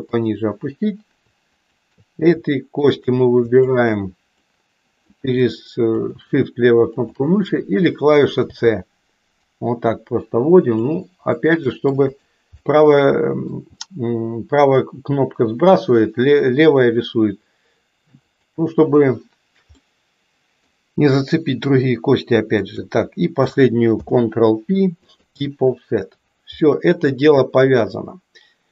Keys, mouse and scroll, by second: 2.7 shift+click, 3.6 shift+click, 4.6 middle click, 5.9 shift+click, 8.4 c, 12.6-13.6 middle drag, 18.2 shift+click, 19.8 middle click, 22.6 shift+click, 23.8 ctrl+p, 26.8-28.7 middle drag.